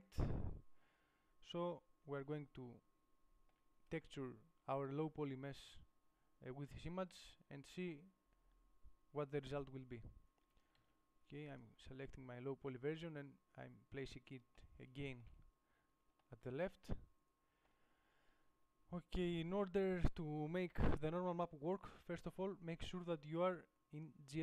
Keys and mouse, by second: 6.3-9.9 middle drag, 11.0 ctrl+z.